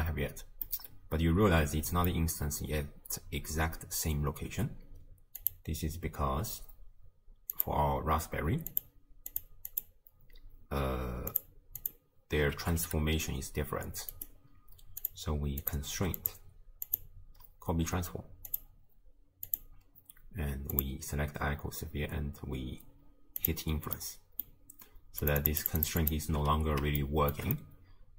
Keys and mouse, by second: 0.8-2.1 drag, 5.5 click, 9.3 click, 9.7 click, 11.4 click, 12.6 g, 15.6 click, 16.3 click, 17.0-18.6 drag, 19.5 click, 23.4 click, 24.1 click, 25.8 click, 27.2 shift+click, 27.7-28.1 drag.